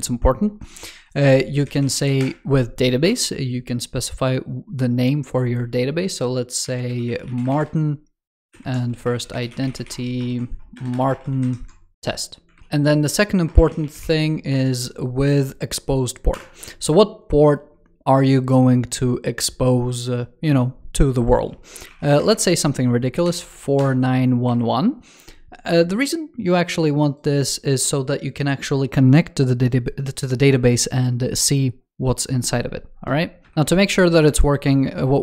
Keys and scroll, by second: 8.4 alt+Left, 11.2 alt+Right, 12.4 super+Right, 33.4 ctrl+Return.